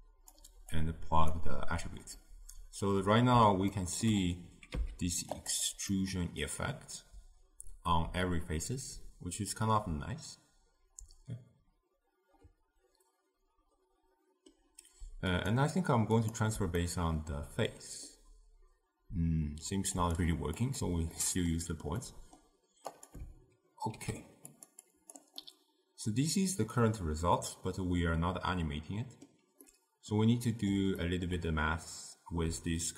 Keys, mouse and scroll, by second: 0.8 click, 2.2-4.8 middle drag, 4.8 z, 6.0-9.1 middle drag, 15.4-16.9 drag, 16.9-20.0 middle drag, 20.0-21.3 drag, 21.3-22.9 middle drag, 22.9 click, 23.8 ctrl+h, 24.6 click, 24.9 click, 25.4-28.6 middle drag, 29.7-32.9 middle drag.